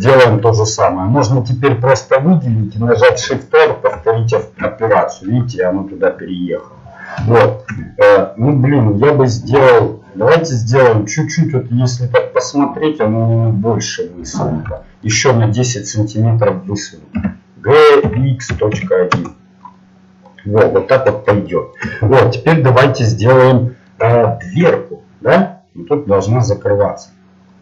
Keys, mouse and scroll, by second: 1.9-4.3 right drag, 4.3 shift+r, 5.9-8.4 middle drag, 14.3-17.1 right drag, 14.7-17.1 middle drag, 17.1 g, 19.8-25.9 middle drag.